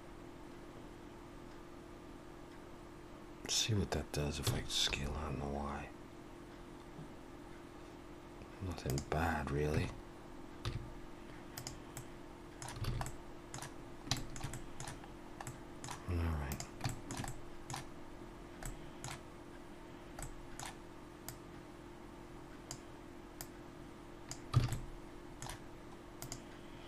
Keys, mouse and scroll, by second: 4.5 s, 9.7 Tab, 10.6 z, 11.9 middle click, 12.9 alt+a, 13.0 middle click, 14.1 shift+middle click, 14.5 middle click, 15.1-15.6 scroll down 2, 15.4 middle click, 16.5 click, 16.9 shift+middle click, 17.3 middle click, 18.6 middle click, 21.3 click, 24.6 alt+a, 24.7 middle click, 26.2 click.